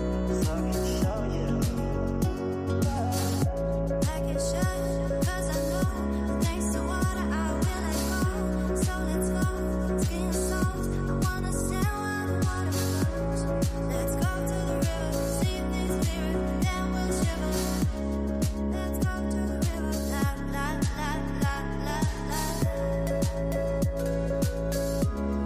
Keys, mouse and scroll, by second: 3.1 middle click, 4.0 scroll down 5, 4.3-5.9 middle drag, 5.9 r, 10.4-11.1 middle drag, 11.1-11.4 scroll up 8, 11.6-12.2 middle drag, 12.2 scroll up 4, 12.5-13.7 middle drag, 13.7 scroll down 2, 14.5 scroll down 1, 16.7 shift+a, 18.6-20.5 middle drag, 20.5 ctrl+alt+KP_0, 22.1 click, 23.7-25.4 drag.